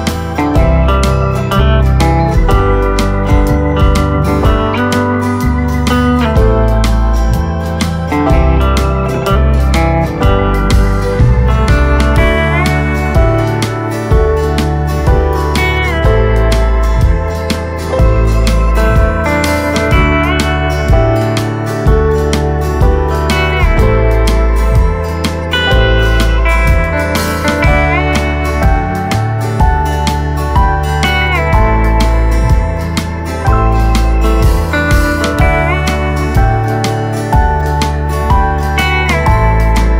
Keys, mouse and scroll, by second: 3.1 middle click, 3.7 space, 4.4 space, 5.4 click, 7.3-7.7 scroll down 2, 8.2-11.3 drag, 13.2 middle click, 14.1-14.4 scroll up 1, 14.4-17.4 middle drag, 17.4 click, 17.9 middle click, 18.3-18.9 scroll down 1, 18.9-21.3 middle drag, 21.3 shift+d, 23.3-24.4 middle drag, 24.4 ctrl+z, 25.5 click, 28.8-31.9 middle drag, 31.9 KP_1, 34.0 shift+d, 37.0 d, 38.5 shift+d.